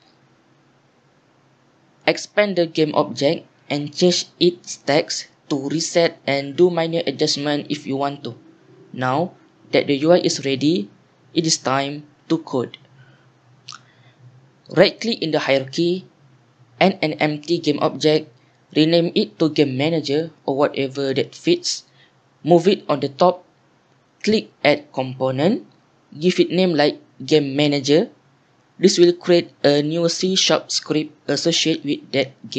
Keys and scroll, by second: 0.0-2.2 typing, 6.7-9.1 typing, 19.4 F2, 20.1-21.8 typing, 21.8 Return, 25.5-27.9 typing, 28.1 Return, 30.7 Return.